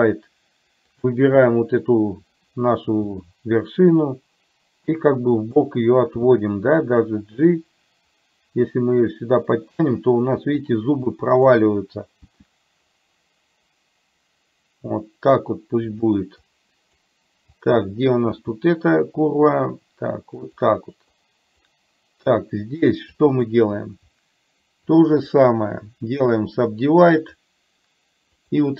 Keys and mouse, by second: 1.1 click, 3.2 g, 6.2 g, 11.1 click, 12.5 g, 16.5 click, 17.6 click, 18.5 g, 21.2 click, 23.2 click, 24.9 shift+click, 26.4-27.5 right drag, 28.5 click.